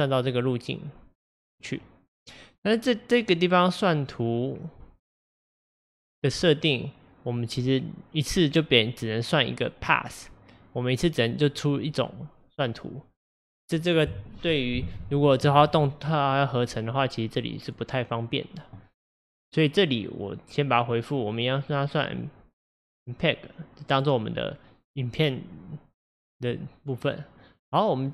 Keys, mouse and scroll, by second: 21.7-28.1 drag.